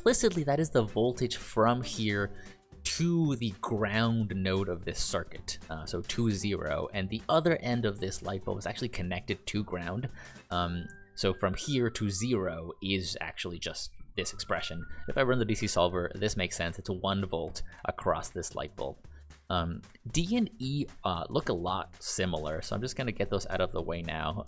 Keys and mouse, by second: 22.0 click, 23.2 click.